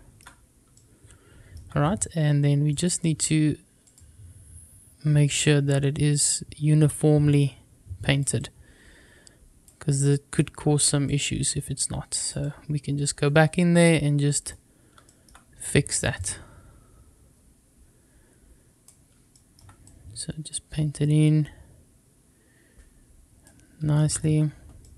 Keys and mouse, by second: 0.7 shift+middle click, 2.6 click, 3.8 click, 5.5-8.1 drag, 8.3-9.6 drag, 9.9 click, 11.0-12.2 drag, 12.4-14.4 drag, 16.1-18.8 drag, 19.2 shift+middle click, 19.8-23.4 drag, 24.7-24.9 middle drag.